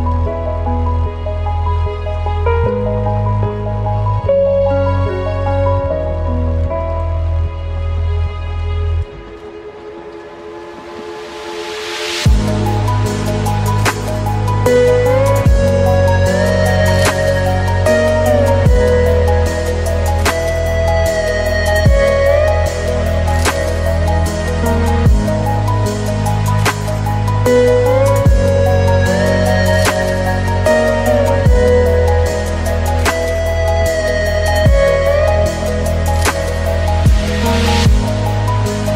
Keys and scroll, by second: 2.3 ctrl+t, 13.4 ctrl+g.